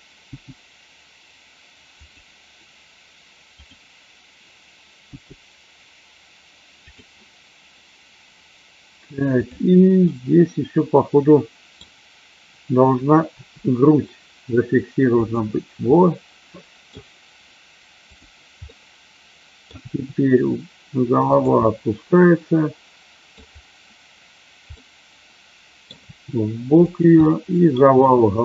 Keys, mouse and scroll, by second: 0.2 g, 1.9 click, 3.5 click, 5.0 g, 6.8 click, 9.9-13.3 middle drag, 13.3 r, 15.2 click, 15.8 middle click, 18.0 click, 18.5-19.7 middle drag, 19.7 r, 21.6-23.3 middle drag, 24.8 middle click, 25.8 scroll down 1, 26.1 r, 26.8 click, 27.2 middle click, 28.0 r.